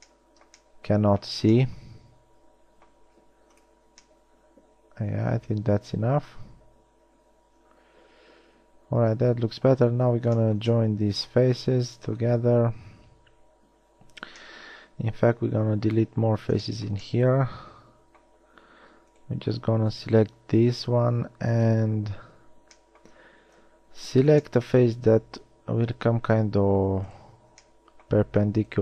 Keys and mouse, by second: 0.5-1.1 drag, 1.1 middle click, 1.5 z, 3.2 x, 21.8 KP_1, 23.7 KP_3.